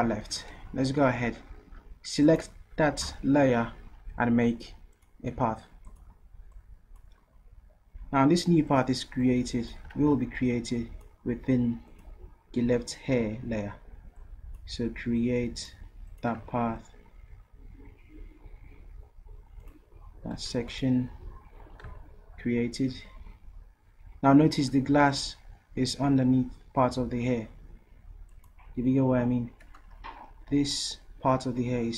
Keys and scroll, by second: 10.0 ctrl+z, 21.1 v.